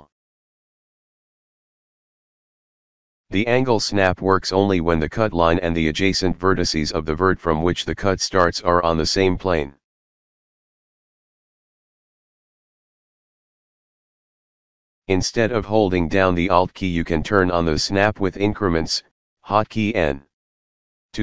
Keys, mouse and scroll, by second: 4.2 alt+middle click, 5.1 middle click, 11.0 alt+middle click, 13.1 scroll up 1, 13.3 middle click.